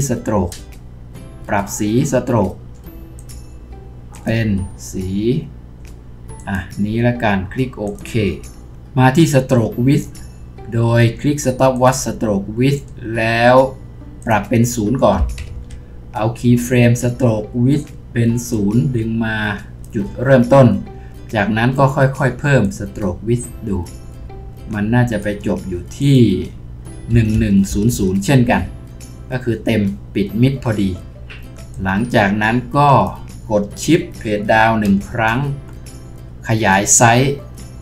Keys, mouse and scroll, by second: 27.7 typing, 28.5 Return, 34.9 shift+Page_Down.